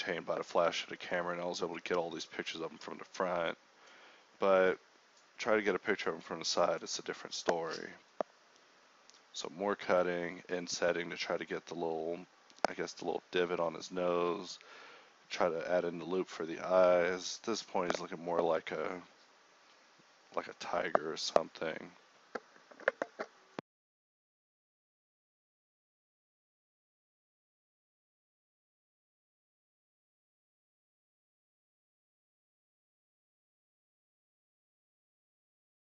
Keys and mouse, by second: 0.0-3.0 typing, 4.2-10.4 typing, 11.2 ctrl+z, 11.8 k, 12.9 a, 14.2-17.0 typing, 14.5 Tab, 14.7 Tab, 17.4 ctrl+z, 18.4 click, 18.9 z, 19.2 KP_1, 19.3 z, 19.7 Tab, 21.8-25.4 typing, 21.9 Tab, 25.6 ctrl+Tab, 26.2 shift+right click, 26.9 z, 27.1 g, 28.9 g, 29.2 z, 29.6 Tab, 30.5-32.4 typing, 30.9 Tab, 31.6 Tab, 31.7 Tab, 33.5 click, 34.0-35.9 typing.